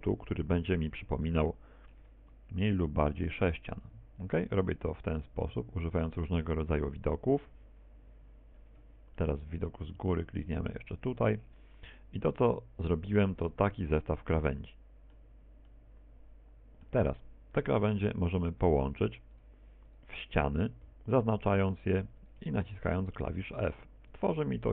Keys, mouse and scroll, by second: 0.2 ctrl+click, 0.8 middle click, 2.0 KP_1, 2.5 KP_3, 3.4 shift+middle click, 5.8 ctrl+click, 7.9 ctrl+click, 10.0 KP_7, 11.2 shift+middle click, 13.0 ctrl+click, 14.0 middle click, 15.4 middle click, 17.7 middle click, 19.9 right click, 20.6 shift+right click, 21.4 right click, 22.0 shift+right click, 22.8 f, 24.2 right click.